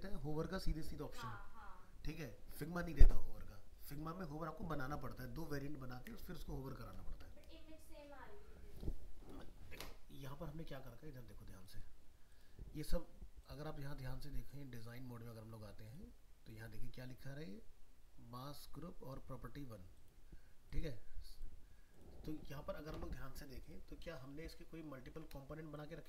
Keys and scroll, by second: 24.6 ctrl+-.